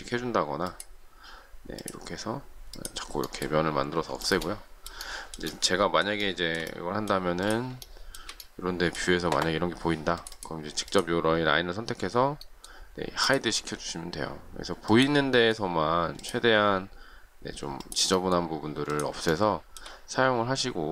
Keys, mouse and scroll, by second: 4.2 shift+middle click, 4.9 shift+middle click, 6.2 shift+middle click, 7.2 space, 7.8 shift+middle click, 19.3 shift+middle click.